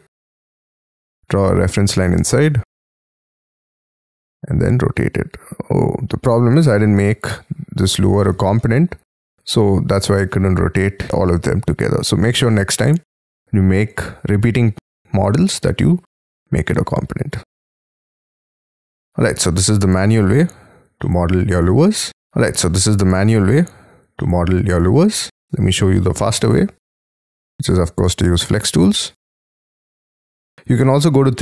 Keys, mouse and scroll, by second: 1.6 q, 2.7 Up, 6.2 space, 6.5-7.1 scroll down 8, 7.1 Escape, 7.6 scroll down 2, 7.9 Escape, 8.3 y, 8.5 middle click, 8.9-12.5 scroll down 6, 15.8 scroll up 5, 16.6-17.6 scroll down 11, 17.6 scroll up 3, 20.3 Delete, 21.0 middle click, 22.1 double click, 22.3 scroll up 3, 23.5 Delete, 24.2 middle click, 25.3 double click, 26.2 j, 26.8 p, 27.3 [, 28.0 space, 28.6 double click, 29.0 p, 30.7 middle click, 31.0 e.